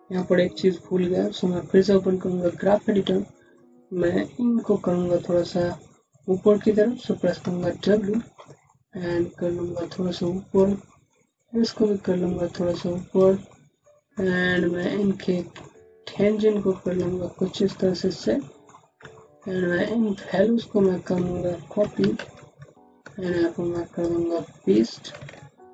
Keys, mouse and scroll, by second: 0.0-2.0 scroll down 1, 2.1 alt+shift+6, 2.9-3.4 scroll up 1, 3.4 click, 3.6 z, 7.0-8.0 typing, 8.5 middle click, 10.1 click, 10.8 middle click, 12.8 click, 13.4 middle click, 14.4 click, 14.5 scroll down 1, 15.1 click, 15.5 middle click, 16.7 click, 17.0 scroll down 1, 17.3 alt+middle click, 17.8 scroll up 1, 18.2 alt+middle click, 18.7 scroll down 1, 19.1 middle click, 19.7 click, 21.7 ctrl+c, 21.9 ctrl+c, 22.6 middle click, 23.6 click.